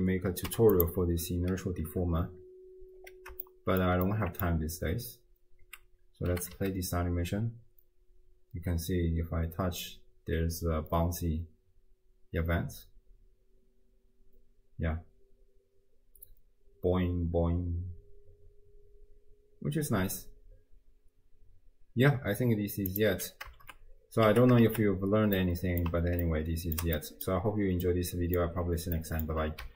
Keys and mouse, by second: 3.4-3.8 shift+middle drag, 4.1 middle click, 5.6 space, 6.5 g, 23.7 shift+space, 24.3 space, 25.4 click, 26.2 ctrl+click, 27.0 click, 27.9-28.4 drag, 29.0 click.